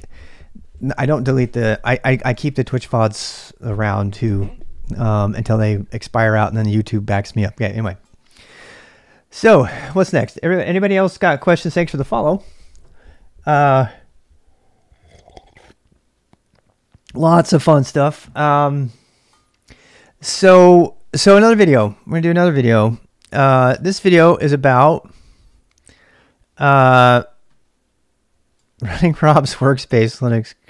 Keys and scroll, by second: 23.0-24.1 typing, 24.1 Return, 26.6 ctrl+[, 26.9 j.